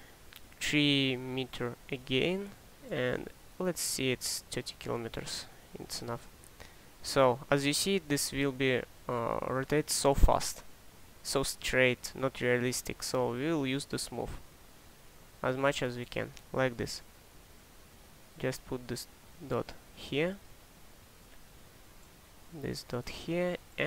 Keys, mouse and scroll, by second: 19.0-20.4 drag.